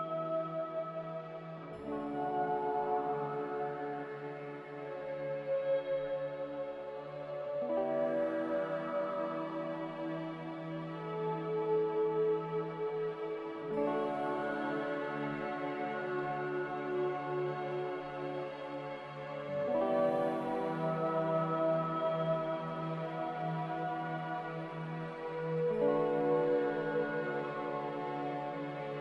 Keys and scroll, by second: 18.3 x, 22.9 z.